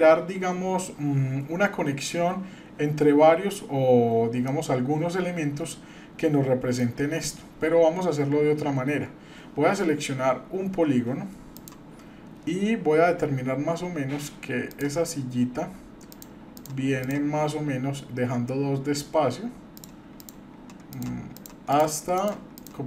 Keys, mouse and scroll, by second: 4.5-6.8 middle drag, 11.6 click, 13.2 scroll up 1, 14.7 click, 16.1 shift+click, 16.6 shift+click, 19.7-22.8 shift+drag.